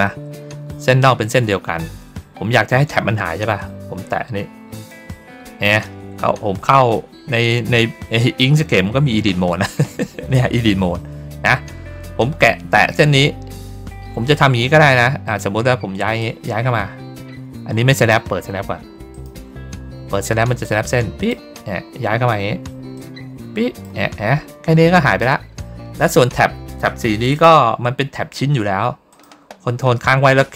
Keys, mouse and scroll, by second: 4.6 click, 15.1 click, 16.1-18.0 drag, 19.0 click, 20.5 click, 22.8 click, 27.2 click, 29.0 ctrl+click.